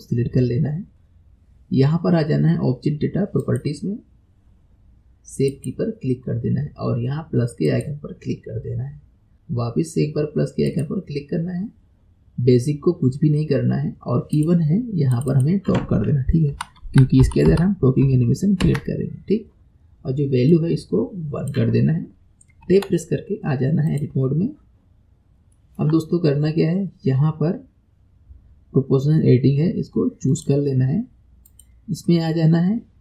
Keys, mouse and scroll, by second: 3.4 click, 5.5-9.3 drag, 10.7-13.7 drag, 14.4 click, 15.2-18.4 drag, 20.5-22.7 drag, 22.7 Tab, 23.9 click, 24.9-25.6 scroll up 4, 25.6-28.6 shift+middle drag, 31.5-33.0 drag.